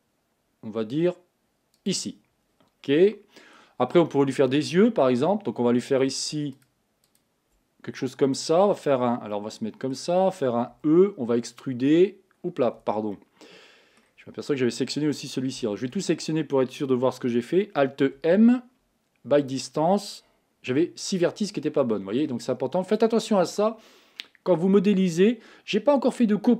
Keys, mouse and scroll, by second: 2.6-3.1 scroll down 2, 3.1-4.6 middle drag, 4.6-6.5 scroll up 3, 6.5 shift+click, 7.1 shift+click, 9.3-10.7 middle drag, 10.7 e, 13.1-15.6 middle drag, 15.6 a, 15.8 a, 18.2 alt+m, 21.2-22.8 middle drag, 22.8 click.